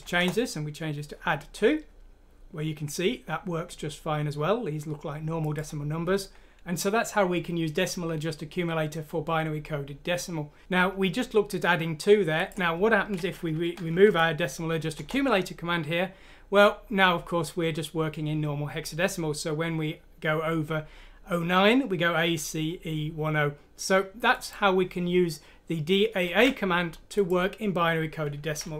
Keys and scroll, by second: 0.1 F6, 0.2 Return, 10.6 typing, 14.0 F6, 15.0 Return.